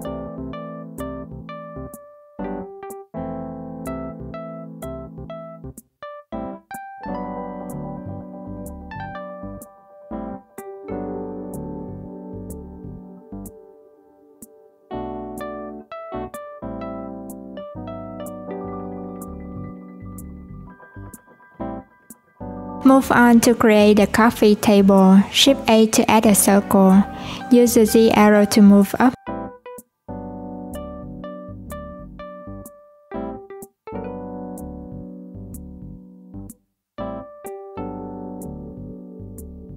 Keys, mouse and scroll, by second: 0.9 click, 1.9-3.1 drag, 3.1 alt+z, 4.3 r, 5.9 alt+z, 6.8 click, 7.6 click, 8.6 click, 9.3 s, 14.0 click, 15.3 click, 16.6 click, 18.1 click, 19.1 click, 19.9 click, 24.4 shift+right click, 24.9 shift+a, 28.1 click, 34.3 click, 35.6 click, 39.3 click.